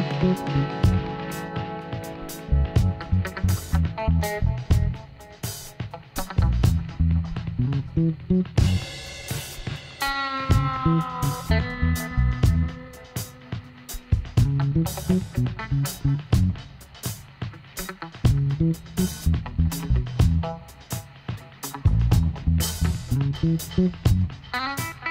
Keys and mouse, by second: 1.3-2.4 middle drag, 3.6 right click, 3.7 b, 4.9-8.8 drag, 9.1 ctrl+z, 10.5-12.5 drag, 11.4 b, 12.5-14.2 drag, 13.9-15.4 middle drag, 14.6-16.4 right drag, 15.4 b, 16.5-18.3 middle drag, 17.2 e, 20.5-22.2 drag, 24.1-25.1 right drag, 24.9 b.